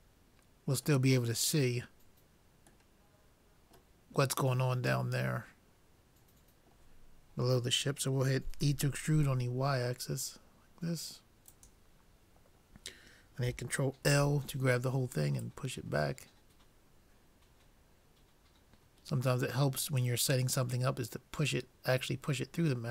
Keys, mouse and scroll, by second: 3.1-6.7 middle drag, 8.6 e, 14.1 ctrl+l, 15.4-17.1 drag, 20.8-22.7 middle drag.